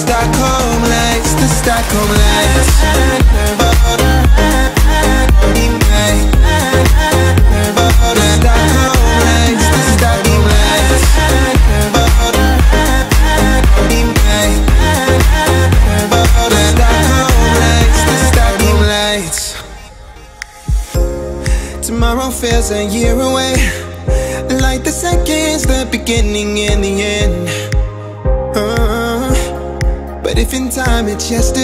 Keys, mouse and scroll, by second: 0.0 space, 0.2-1.0 scroll down 1, 1.0 click, 1.8 ctrl+c, 2.2 p, 2.4 click, 3.1 space, 3.7 click, 4.9 shift+e, 5.9 click, 7.3 right click, 8.0 click, 9.8 e, 10.2 space, 10.3 click, 12.7-16.0 typing, 13.1 click, 15.7 scroll up 1, 16.2 click, 17.1 ctrl+c, 17.5 e, 17.7 click, 18.1 space, 19.0 p, 19.2 click, 19.5 space, 20.2-20.6 scroll up 1, 21.2 middle click, 21.7-23.0 scroll up 1, 23.0 middle click, 24.2 t, 24.6 click, 25.6-26.0 typing, 26.2 Return, 26.9 click, 27.2 space, 28.1 r, 28.7 click, 29.6 space, 29.9-30.2 scroll up 1, 30.2 middle click, 30.6 scroll up 1, 30.8 shift+middle click.